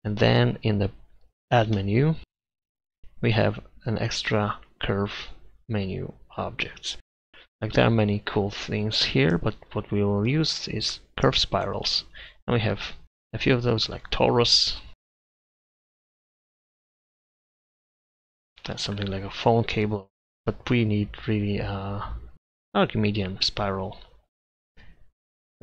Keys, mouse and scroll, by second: 1.7 shift+a, 14.4 middle click, 15.6-17.4 drag, 22.7 middle click, 25.5 click.